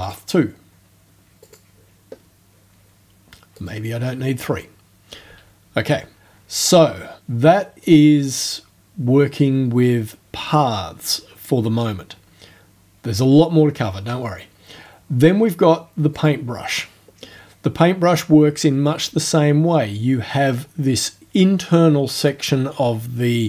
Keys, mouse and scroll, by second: 0.1 click, 1.5 click, 3.6 right click, 7.9 right click, 16.2 click.